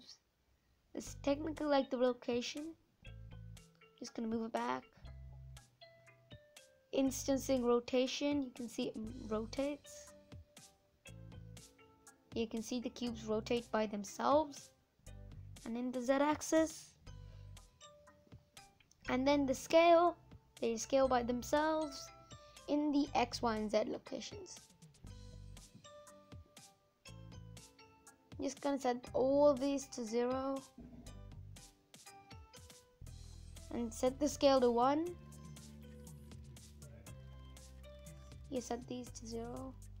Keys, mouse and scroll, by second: 0.4-0.8 scroll down 4, 0.8-3.2 middle drag, 3.2 g, 6.3-7.9 drag, 7.9-8.6 scroll up 5, 8.6-9.9 middle drag, 9.9-12.8 drag, 14.7-24.1 drag, 24.1 middle click, 24.7 scroll down 4, 24.8-28.7 middle drag, 28.7-40.0 drag.